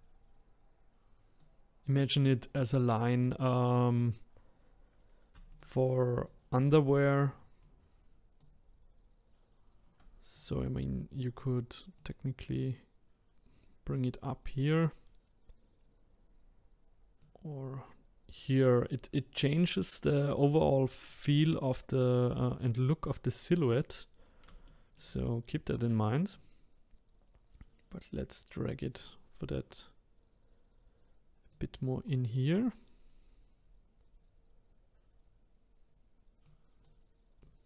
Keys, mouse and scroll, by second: 5.5 shift+click, 6.1 shift+click, 7.6-10.4 shift+drag, 11.0 click, 12.0 click, 15.8-16.2 scroll up 1, 16.2-17.2 scroll down 1, 17.2 click, 21.0-21.6 scroll down 3, 21.6-23.6 scroll up 1, 23.6-24.6 scroll up 2, 24.6 shift+middle click, 25.1-26.3 scroll up 3, 26.3 click, 31.9-33.0 scroll down 10, 33.0-34.0 scroll up 6, 36.4 click, 37.4 click.